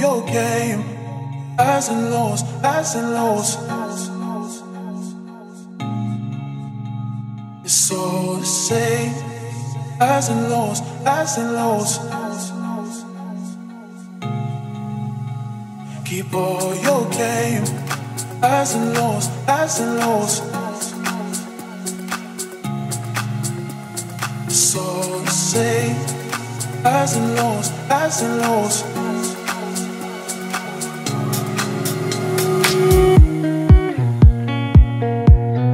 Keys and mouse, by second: 1.3 KP_0, 3.4 middle click, 13.4 ctrl+z, 18.5 w, 24.6 ctrl+z.